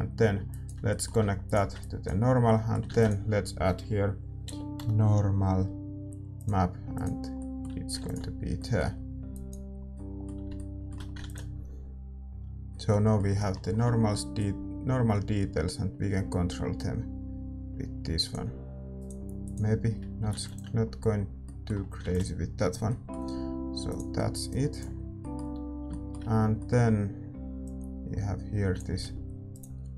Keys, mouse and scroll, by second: 1.4-7.0 middle drag, 3.5 shift+a, 7.0-8.6 drag, 7.5-15.4 middle drag, 8.6 ctrl+s, 9.9-10.9 drag, 14.4-21.4 drag, 20.9 ctrl+s, 20.9-29.5 middle drag, 27.6-29.9 drag.